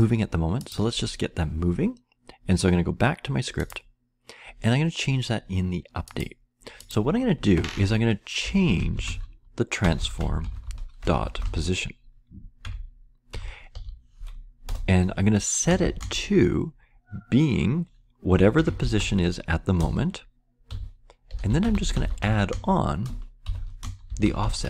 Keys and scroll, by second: 8.1-13.7 typing, 14.6 Return, 15.5-24.6 typing.